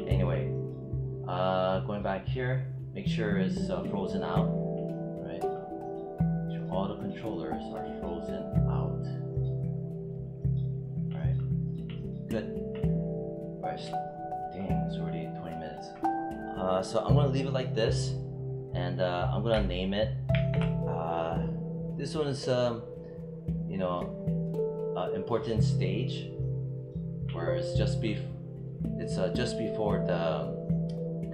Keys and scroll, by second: 20.2 ctrl+shift+s.